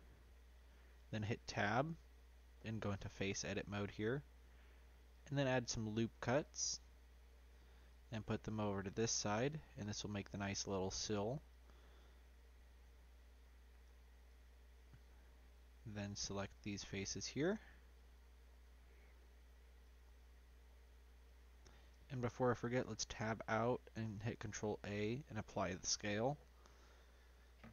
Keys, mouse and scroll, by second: 1.2 Tab, 1.7 middle click, 2.5 3, 3.2 click, 5.1-10.7 drag, 10.7 2, 11.4-12.9 drag, 12.9 ctrl+z, 14.2-16.0 drag, 16.0 3, 16.5 click, 16.9 click, 17.3 middle click, 17.9 shift+click, 18.5-19.8 middle drag, 19.8 shift+click, 20.1-21.2 middle drag, 21.2 shift+click, 21.8 middle click, 22.5 Tab, 23.9 ctrl+a.